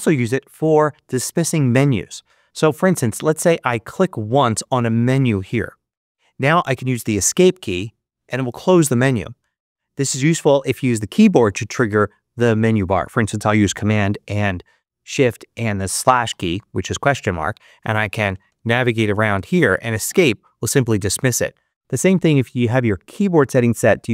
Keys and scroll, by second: 7.6 Escape, 16.2 shift+super+/, 18.0 Left, 19.9 Escape.